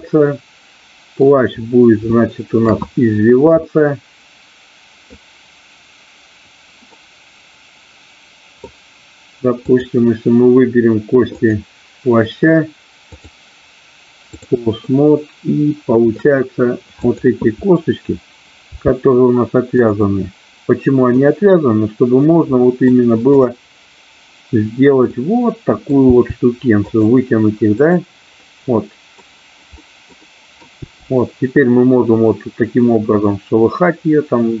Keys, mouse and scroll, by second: 0.0-1.1 middle drag, 3.7-5.1 middle drag, 6.9-8.6 middle drag, 9.7 click, 11.4 click, 13.1-14.4 drag, 14.9-16.1 middle drag, 17.1-18.2 drag, 18.6 g, 19.7 click, 20.1-21.0 scroll up 1, 21.0 scroll down 1, 22.6 scroll up 1, 23.4-24.6 drag, 25.0 middle click, 26.0 g, 26.9 click, 27.7 click, 28.4-28.9 scroll up 1, 28.9 middle click, 29.7-30.6 scroll up 1, 30.7 g.